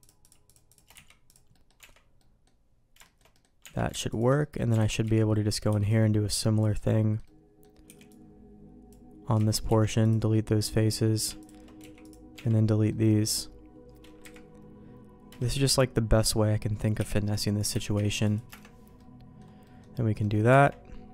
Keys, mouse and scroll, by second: 0.0 shift+click, 0.9 x, 1.5 middle click, 1.7 Tab, 2.1 middle click, 3.0 shift+middle click, 3.3 middle click, 3.6 Tab, 4.1 alt+click, 4.3 middle click, 4.7 alt+a, 5.0 z, 5.3 middle click, 5.6 b, 6.7 middle click, 7.2 middle click, 7.8 b, 9.3 z, 9.6 x, 10.3 middle click, 11.7 x, 12.3 Tab, 12.8 middle click, 14.2 KP_1, 15.5 KP_3, 16.9 k, 18.9 middle click, 19.6 middle click, 20.2 middle click, 20.4 Tab.